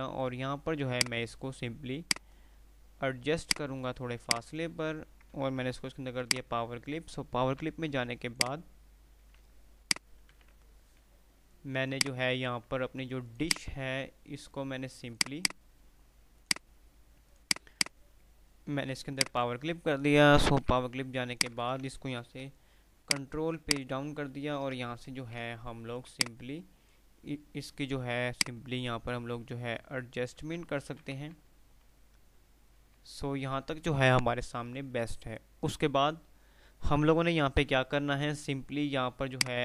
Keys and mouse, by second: 6.2 o, 6.5 click, 7.8 d, 8.5 click, 10.1-10.9 typing, 11.4 F2, 13.4 click, 16.2 typing, 19.4 click, 19.4 o, 20.8 d, 21.5 click, 22.5 shift+Page_Down, 23.2 click, 25.4 ctrl+z, 26.2-27.1 alt+drag, 30.1 ctrl+r, 30.8-31.9 typing, 33.1 f, 34.7 F3, 38.1 F3, 39.5 click.